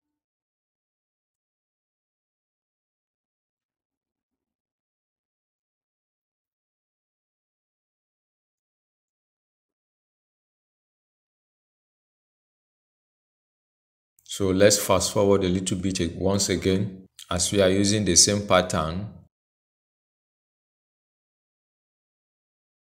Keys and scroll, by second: 13.0 ctrl+c, 16.7 ctrl+j, 20.2 ctrl+a, 21.6 ctrl+v.